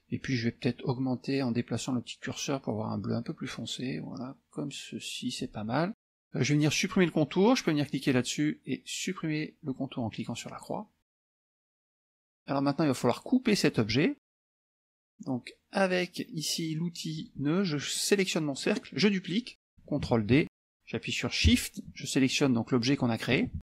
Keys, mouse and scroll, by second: 0.9-5.8 drag, 8.0 click, 10.5 click, 11.3 click, 17.2 click, 17.9 click, 20.4 ctrl+d, 22.4 shift+click.